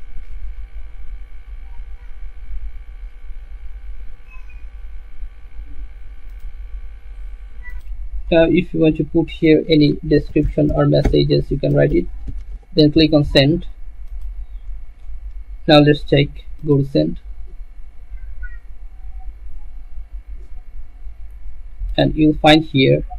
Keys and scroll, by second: 10.3-12.9 typing.